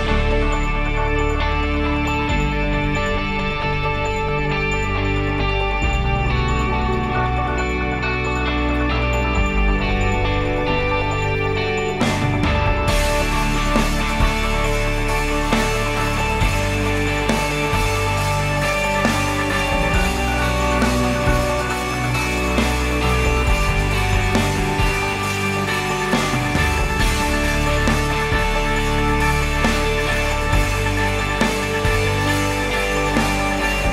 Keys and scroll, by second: 3.1 6, 3.3 Return.